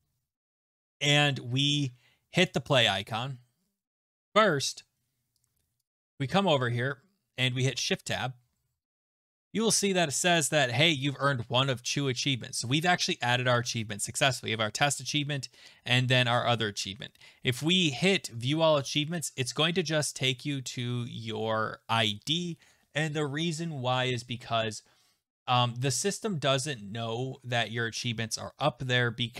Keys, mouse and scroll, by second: 2.4 click, 5.8 click, 8.2 Tab, 9.1 Tab, 9.1 click, 9.1-9.4 scroll, 25.7-27.3 scroll, 27.3-28.1 scroll, 28.1-29.3 scroll.